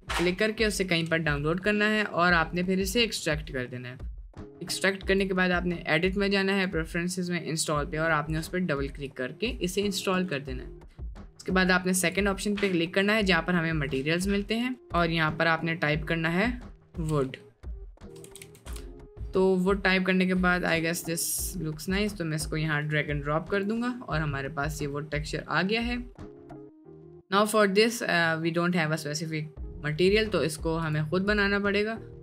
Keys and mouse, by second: 4.6-5.4 drag, 11.9 click, 14.9-18.8 drag, 18.2 o, 23.6 drag, 24.0 middle click, 24.5 middle click, 25.5 middle click, 26.2 middle click, 26.5 click, 27.5 click, 30.9-32.2 drag.